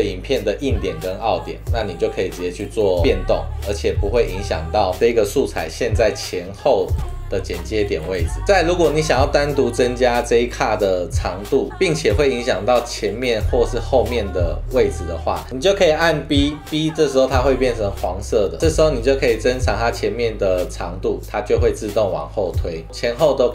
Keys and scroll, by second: 16.3 b, 22.0 super+z.